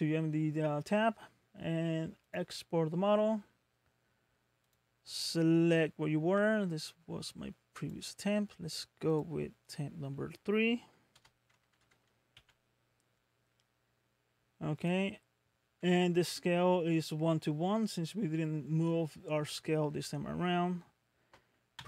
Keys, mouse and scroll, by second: 2.2 click, 11.1 BackSpace, 12.3 KP_3.